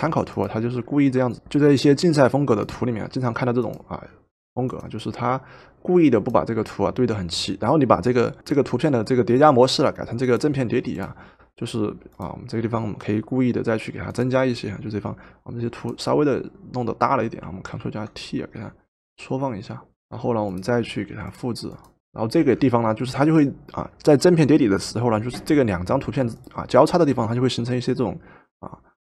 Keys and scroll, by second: 17.8 ctrl+t, 19.9 Return.